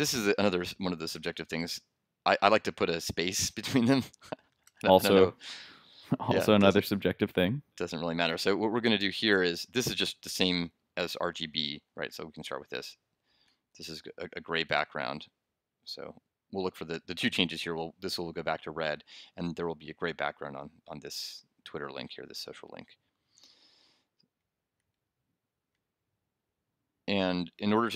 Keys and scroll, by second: 13.7 super+BackSpace, 14.8 super+s, 22.0 super+r, 25.6 super+Tab.